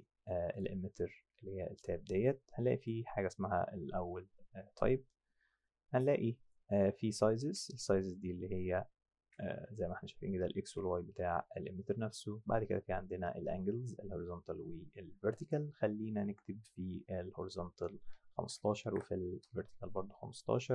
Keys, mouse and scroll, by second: 0.5 click, 2.8 click, 6.5 click, 8.6 click, 10.6 ctrl+z, 15.4 click, 18.3 KP_1, 18.4 KP_5, 18.6 Tab, 18.8 KP_1, 18.9 KP_5, 19.4 KP_Enter.